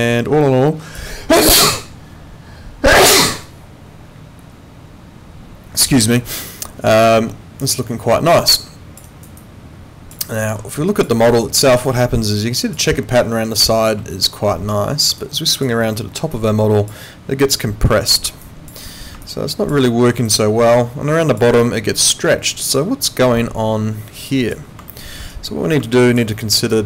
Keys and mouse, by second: 7.0 alt+click, 9.1 alt+right click, 9.4 alt+click, 10.3 alt+middle click, 10.7 alt+click, 11.2 alt+middle click, 11.6 alt+right click, 12.0 alt+click, 12.9 alt+middle click, 13.6 alt+click, 15.2 alt+click, 15.8 alt+middle click, 16.3 alt+click, 18.4 alt+click, 19.2 alt+click, 19.8 alt+middle click, 20.2 alt+click, 21.6 alt+click, 24.9 alt+middle click, 25.3 alt+right click, 25.8 alt+click, 26.3 alt+middle click, 26.6 alt+right click.